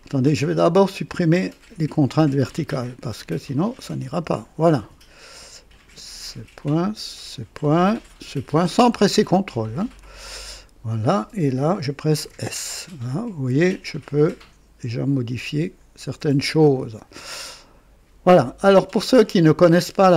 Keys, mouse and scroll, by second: 0.0 click, 1.1 click, 1.8 Delete, 3.8 click, 4.2 Delete, 4.2 Delete, 5.7 click, 7.3 click, 9.7 click, 12.2 typing, 13.7-16.8 drag, 16.6 typing, 18.2 click, 19.6 click.